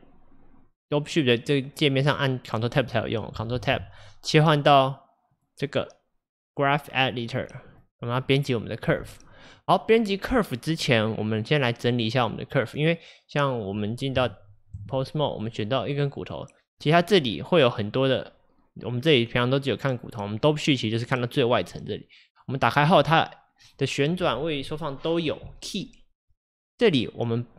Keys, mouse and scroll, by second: 3.6 ctrl+Tab, 5.4-9.0 drag, 9.0 space, 14.2 Tab, 14.8 Tab, 15.4 click, 16.7 scroll down 1, 22.4-27.5 drag.